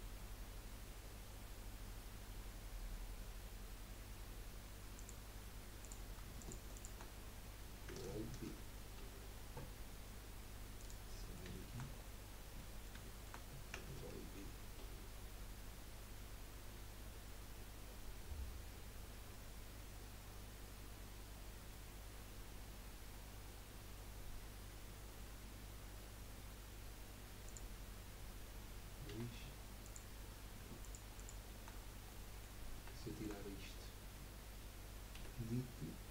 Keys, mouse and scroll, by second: 5.8 click, 6.4 alt+shift+click, 6.7 alt+shift+click, 9.0 ctrl+b, 11.3 middle click, 11.9-12.6 scroll up 8, 12.6-14.8 middle drag, 14.8 ctrl+b, 18.9-27.4 drag, 18.9-27.4 right drag, 21.9-27.4 middle drag, 29.1 2, 29.8 click, 30.8 alt+shift+click, 31.1 alt+shift+click, 31.7-32.1 scroll down 4, 32.1 middle click, 32.6-33.0 scroll down 4, 33.0 shift+middle click, 33.4-34.7 scroll up 3, 35.3 Delete.